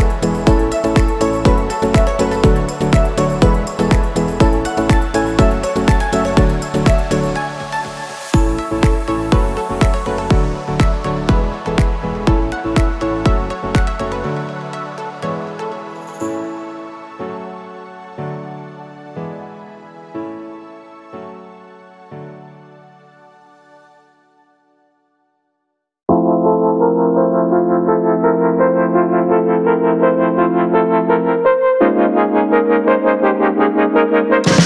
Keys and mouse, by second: 1.5 click, 4.1-7.8 drag, 8.1 middle click, 8.8 click, 9.4 middle drag, 10.0 shift+a, 11.1 z, 12.1 z, 16.1 shift+a, 22.0 ctrl+shift+drag, 25.8-30.1 drag, 31.5 shift+a.